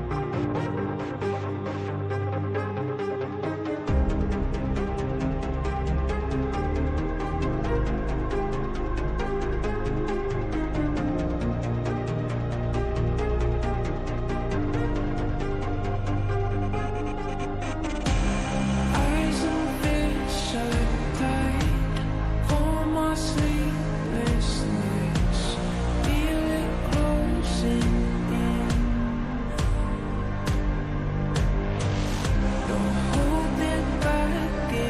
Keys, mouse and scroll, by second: 0.1 right click, 1.0 click, 2.7 right click, 3.5 click, 5.7 click, 8.6-20.0 drag, 20.0-28.7 drag, 32.5 shift+click, 33.6 shift+click.